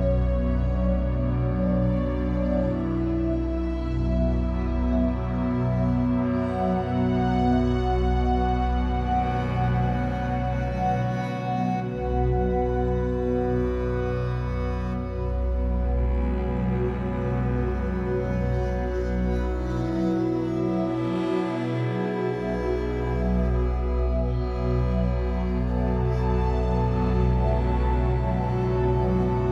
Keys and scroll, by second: 1.8 b, 5.7 Escape, 6.2 3, 7.4 shift+Tab, 7.8 Escape, 8.7 3, 10.2 l, 11.1 shift+w, 11.8 Escape, 14.5 l, 15.6 shift+e, 17.8 Escape, 20.2 Escape, 27.4 F8.